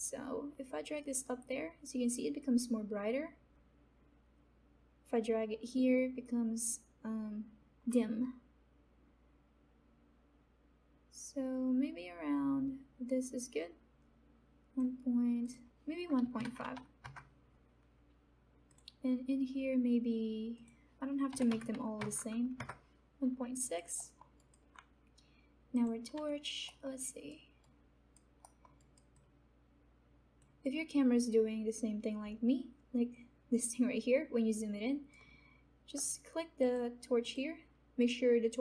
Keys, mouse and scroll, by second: 0.9-10.9 drag, 15.4 click, 18.6 click, 23.6 alt+click, 24.3 alt+right click, 26.1 click, 26.2 alt+right click, 27.0 alt+middle click, 27.9 alt+right click, 28.4 alt+middle click, 28.7 alt+right click, 29.1-30.6 alt+drag, 30.9-36.0 alt+right drag, 36.0 click.